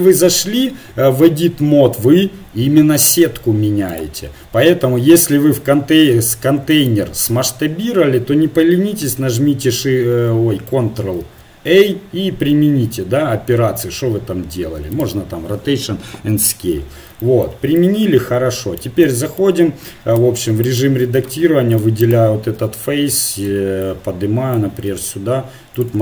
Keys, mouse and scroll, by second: 1.6 s, 4.3 Tab, 5.2 s, 9.8 shift+a, 11.2 ctrl+a, 16.1 KP_1, 20.1 Tab, 20.7 right click, 21.2 ctrl+Tab, 22.5 KP_1, 24.9 s.